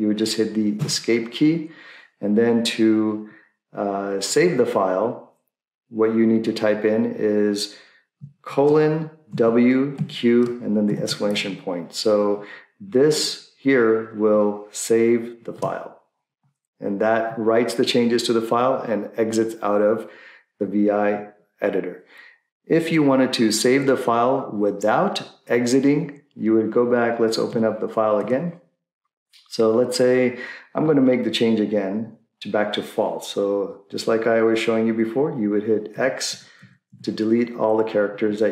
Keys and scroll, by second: 0.7 Escape, 8.4-10.9 typing, 15.6 Return, 28.2 shift+Return, 31.3 Left, 31.7 Left, 36.0 x, 36.3 x.